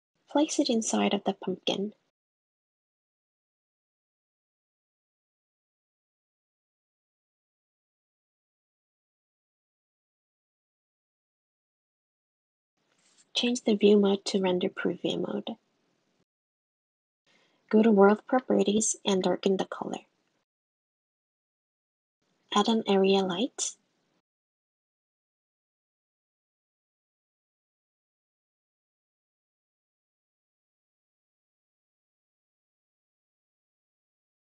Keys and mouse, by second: 0.3 g, 2.4 g, 3.9 g, 5.6 click, 6.2 click, 14.2 click, 16.0 click, 16.5 click, 19.2 click, 22.3 click, 23.0 shift+a, 25.2 g, 28.6 r, 29.4 g, 31.6 g, 32.3 r, 32.9 g, 34.1 click.